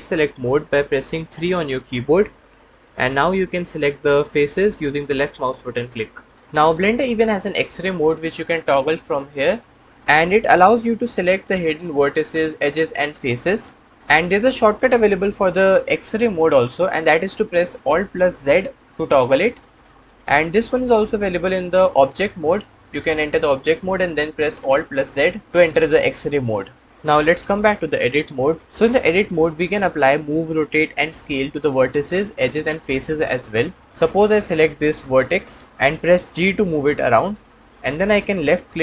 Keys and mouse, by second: 2.2 3, 9.7 click, 9.8 3, 10.8 1, 11.1 click, 12.0 click, 17.5 alt+z, 18.5 alt+z, 19.5 alt+z, 20.4 alt+z, 21.6 Tab, 24.4 alt+z, 26.4 alt+z, 27.3 Tab, 36.5 g.